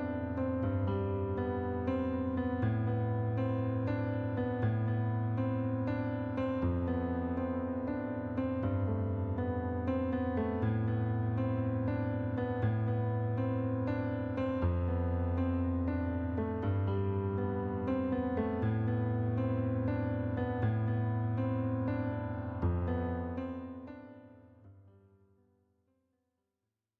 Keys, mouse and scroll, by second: 0.1 click, 1.4 shift+click, 2.0 ctrl+z, 2.3 click, 4.0 shift+click, 5.9 click, 7.1 click, 7.9 click, 8.8 click, 9.9 right click, 10.8 middle click, 12.3 click, 13.1 click, 15.3 right click, 16.9 click, 18.4 right click, 19.9 middle click, 20.7 click, 22.3 click, 23.0 right click, 23.8 click, 24.6 click, 25.0 middle click.